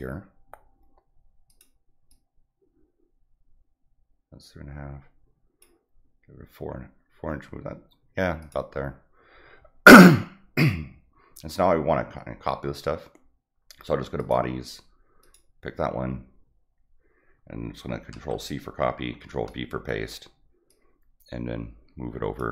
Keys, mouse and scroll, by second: 1.4 click, 2.0-5.6 drag, 8.4 click, 14.1 click, 15.2 click, 18.2 ctrl+c, 19.2 ctrl+v, 20.6-22.3 drag.